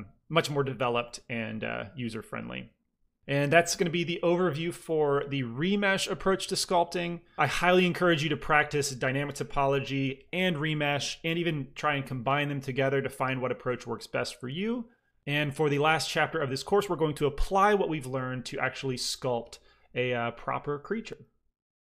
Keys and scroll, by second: 0.9 ctrl+r.